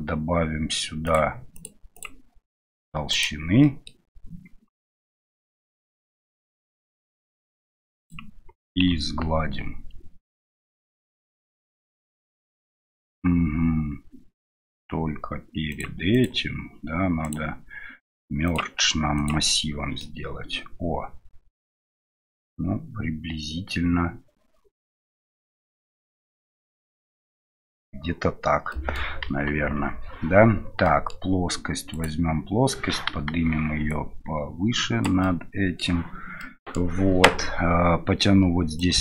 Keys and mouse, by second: 1.5 click, 2.0-3.6 drag, 3.6 middle drag, 5.2 middle click, 6.4-8.2 drag, 11.4-13.0 middle drag, 15.7 click, 16.1 click, 17.3-18.6 drag, 19.2 click, 20.0-27.3 middle drag, 28.7 middle click, 29.2 KP_1, 30.8 middle click, 31.9 right click, 33.1 KP_1, 33.9-35.2 drag, 35.3-35.8 middle drag, 36.5 middle click, 38.8 click.